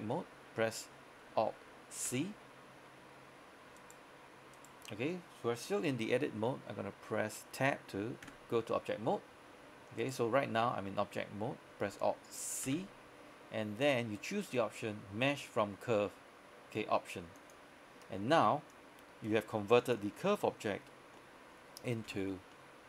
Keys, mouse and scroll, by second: 2.1 alt+c, 3.9 right click, 8.3 Tab, 10.1 right click, 12.8 alt+c, 17.5 click, 18.1 middle click, 18.8 click, 20.2 scroll up 1, 20.5 middle click, 21.0 scroll up 1, 21.2 middle click, 22.1 Tab, 22.6 middle click.